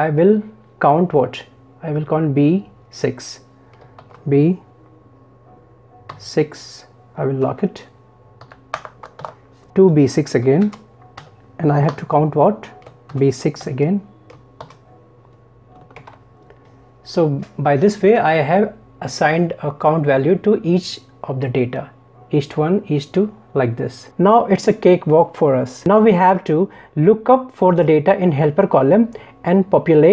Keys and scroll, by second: 16.0 ctrl+Return.